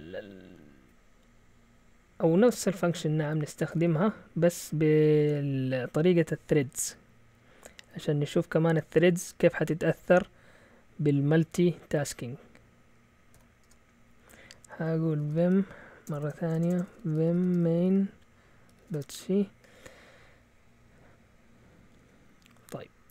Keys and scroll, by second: 3.8 Return, 5.1 shift+;, 13.6 Return, 13.6 typing, 14.8-19.3 typing, 20.2-21.1 Down, 20.7-21.7 typing.